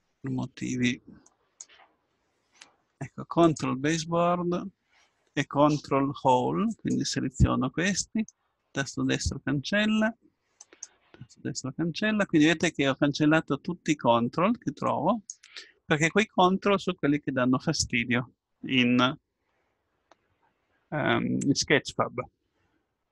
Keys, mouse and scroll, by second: 1.3-8.6 drag, 8.0 right click, 8.9-9.9 drag, 10.6-11.6 drag, 11.6-14.9 right drag, 14.9-16.9 drag.